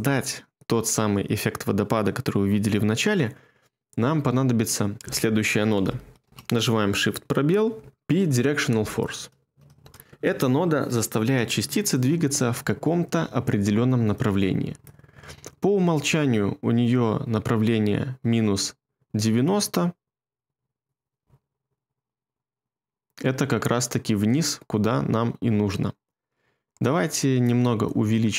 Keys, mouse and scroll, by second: 6.2 space, 7.9-9.2 typing, 9.7 Return, 21.1 space, 24.2 space.